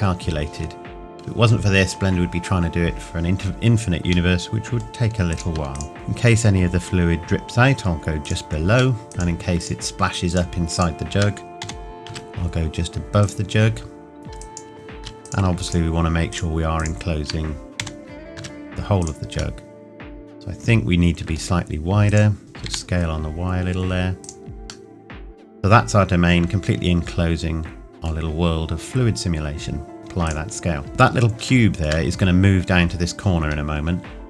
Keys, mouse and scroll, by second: 4.3 middle click, 5.3 click, 5.8 shift+click, 5.9 g, 8.2 click, 9.0 middle click, 9.1 click, 9.6 shift+click, 11.6 g, 13.2 click, 15.3 click, 15.7 shift+click, 17.8 g, 19.0 click, 19.6 middle click, 22.1 click, 22.4 s, 24.2 click, 24.9 middle click, 28.5-30.0 scroll up 1, 30.0 ctrl+a, 30.3 click, 30.9 middle click, 31.6 shift+middle click, 33.4-34.2 scroll up 1.